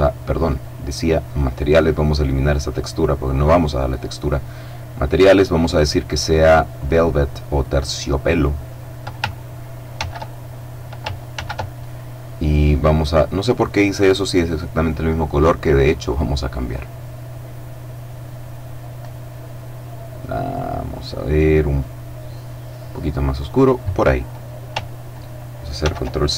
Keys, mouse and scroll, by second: 0.2 click, 1.0 click, 2.2 click, 3.0 click, 4.0 click, 5.2 click, 6.6 click, 8.0 click, 9.7 ctrl+c, 11.1 ctrl+v, 12.6 click, 15.4-19.2 drag, 19.6-20.9 scroll down 2, 21.3-22.2 scroll up 2, 22.2-22.7 scroll down 2, 25.5 ctrl+c.